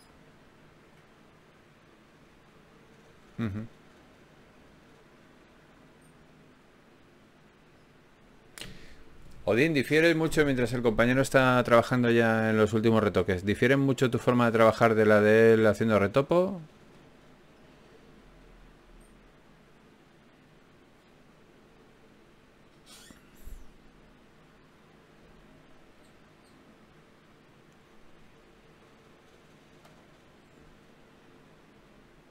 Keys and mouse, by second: 0.9 g, 1.3-4.5 right drag, 1.9 g, 4.5 ctrl+Tab, 6.3 f, 6.8 f, 7.1 f, 8.3 f, 9.6 f, 10.4 f, 13.6 click, 14.4 f, 16.4 ctrl+z, 17.3 z, 18.6 z, 18.8 ctrl+Tab, 21.6 ctrl+Tab, 22.4-24.0 drag, 24.0 f, 27.0 click, 27.8 f, 28.9 f, 30.3 f, 31.7 ctrl+Tab.